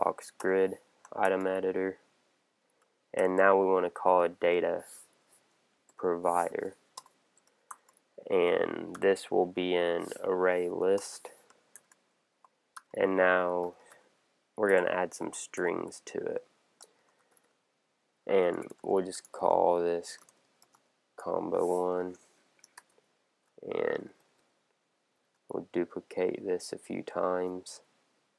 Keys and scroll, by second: 0.4 Return, 3.2 shift+,, 6.9 Return, 10.3 Down, 11.0 Return, 14.7 Return, 17.2 shift+t, 20.1 shift+c, 22.8 super+Right, 24.0 alt+super+Down, 26.6 Up.